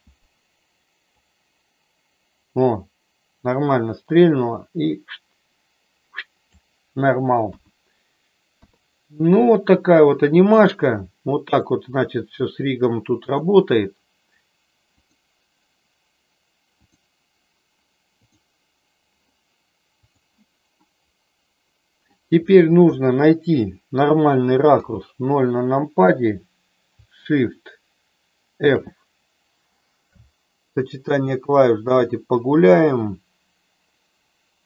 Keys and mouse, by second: 1.2-6.5 drag, 7.4 KP_1, 8.5 KP_3, 11.4 click, 13.7 click, 18.2 click, 20.1 click, 20.8-22.1 middle drag, 24.7 KP_0, 28.7 shift+f, 30.1 Right.